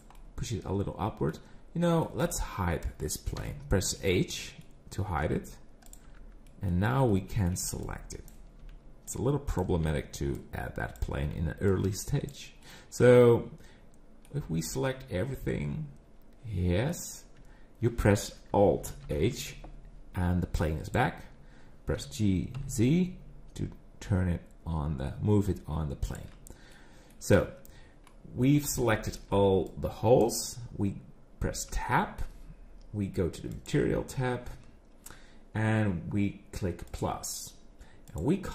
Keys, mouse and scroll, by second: 0.2 middle click, 1.5-1.8 scroll down 5, 1.8 middle click, 2.2 click, 3.4 h, 4.0 middle click, 5.0 scroll up 6, 5.2 Tab, 5.8 click, 6.1 Tab, 6.5 middle click, 7.1 middle click, 7.6 b, 8.6 b, 12.6 middle click, 14.4 scroll down 5, 14.7 middle click, 17.4 Tab, 19.0 alt+h, 20.8 click, 21.9 g, 26.7 middle click, 27.2 Tab, 28.1 middle click, 28.6 scroll up 4, 28.9 middle click, 29.3 b, 31.7 Tab, 31.9 middle click, 33.5 click, 36.9 click, 38.1 click.